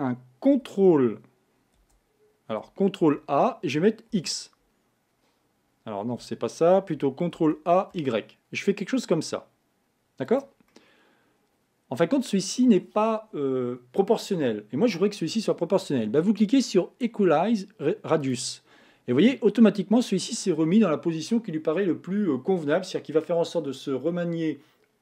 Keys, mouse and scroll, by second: 0.7 c, 3.0 ctrl+a, 7.5 ctrl+a, 10.7-13.7 middle drag, 18.3 click, 19.3-22.3 middle drag.